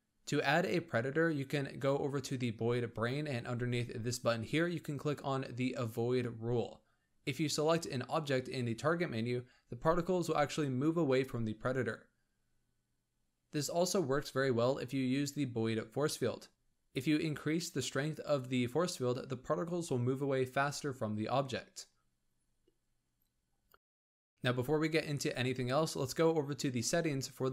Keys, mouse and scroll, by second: 0.0-0.5 scroll down 2, 0.5 click, 0.8-2.8 scroll down 18, 2.8-5.3 drag, 7.0 scroll up 1, 7.3 space, 7.7-10.4 shift+middle drag, 10.4 click, 12.0 shift+a, 14.8 g, 16.6 click, 18.0-22.0 drag.